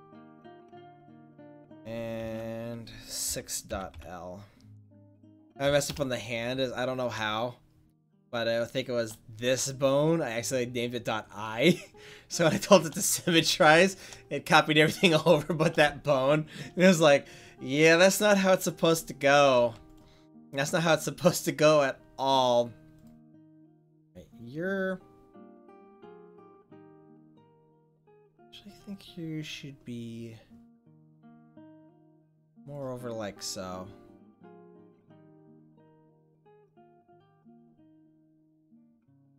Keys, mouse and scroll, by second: 13.8 middle click, 19.6 ctrl+s, 23.3-24.8 right drag, 24.8 middle click, 28.5-29.8 middle drag, 32.3 click, 33.0 middle click, 34.6 middle click, 35.2 middle click, 38.7 right click, 39.1-39.3 middle drag.